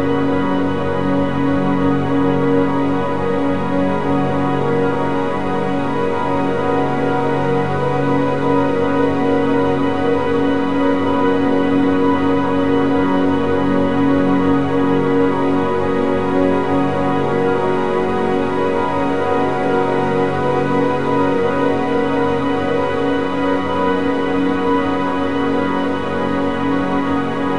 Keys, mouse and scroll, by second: 0.0 shift+`, 10.5 a, 10.7 a, 15.8 click, 17.5-18.9 middle drag, 18.9 click, 19.9 Delete, 20.4-20.8 scroll up 4, 21.1-22.3 middle drag, 22.3 click, 23.4-26.4 drag.